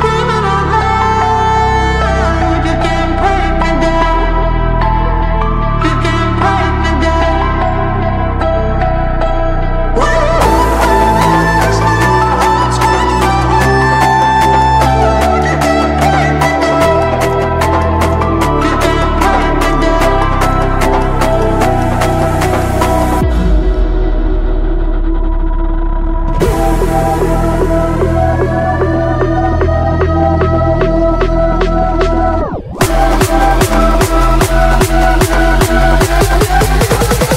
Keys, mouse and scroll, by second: 0.1 k, 0.2 scroll up 1, 0.4 k, 0.8 click, 2.0 ctrl+l, 2.6 ctrl+k, 3.2-4.0 drag, 8.6-10.2 drag, 23.2-23.8 ctrl+drag, 25.2-25.8 drag, 27.6-28.2 click, 31.6 shift+click, 32.4 ctrl+q, 34.0 click, 35.1 scroll down 1, 35.5 p, 36.4-37.2 shift+drag.